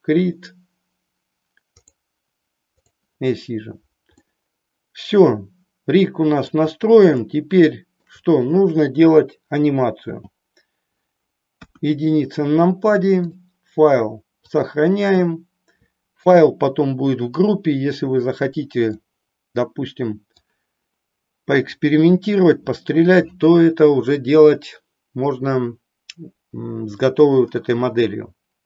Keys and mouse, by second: 1.8 click, 2.8 click, 4.2-6.5 middle drag, 7.3 shift+middle click, 9.9 n, 11.5 KP_1, 13.3-14.8 drag, 19.0-20.3 middle drag.